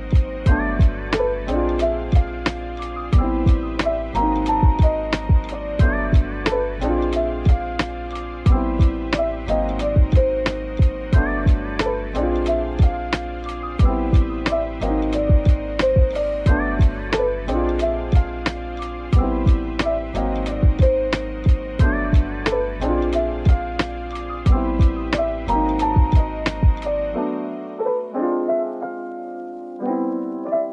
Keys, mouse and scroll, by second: 0.0 Tab, 1.6 shift+super+click, 2.8 typing, 3.4 middle click, 5.0 alt+click, 5.7 click, 8.7 alt+shift+click, 12.5-17.1 scroll down 1, 17.7 Tab, 18.5 typing, 20.2 typing, 20.3 shift+click, 21.4 shift+click, 21.7 ctrl+l, 24.4 ctrl+l, 26.2-26.7 scroll down 1, 27.2 scroll down 1, 27.3 ctrl+z, 29.5 ctrl+z, 29.7 shift+click, 30.4 shift+click, 30.6 ctrl+l.